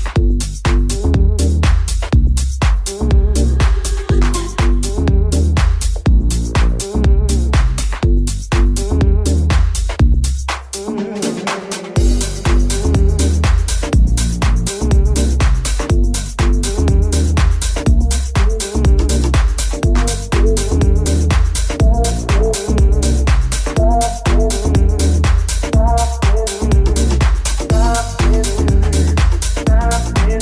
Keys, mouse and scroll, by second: 1.4 KP_3, 1.9 g, 2.8-30.4 shift+middle drag, 4.7 s, 11.7 KP_3, 12.8 s, 13.9 g, 18.4 KP_1, 19.6 g, 21.8 alt+z, 23.4 s.